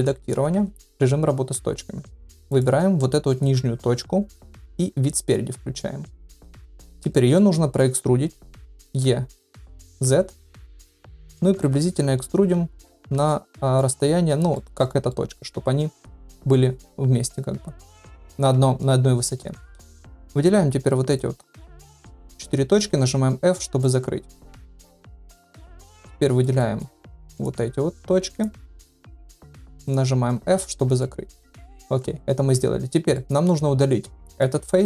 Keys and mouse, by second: 0.0 Tab, 0.9 1, 2.5 click, 4.9 KP_1, 7.1 shift+middle click, 8.8 e, 13.2 shift+middle click, 14.5 shift+middle click, 15.1 middle click, 20.2 shift+click, 21.6 shift+middle click, 22.4 shift+click, 23.0 f, 23.8-25.5 middle drag, 25.7 middle click, 26.2 middle click, 26.6 shift+middle click, 27.4 click, 28.3 shift+click, 30.4 f, 31.0 shift+middle click, 32.0 3, 33.1 middle click.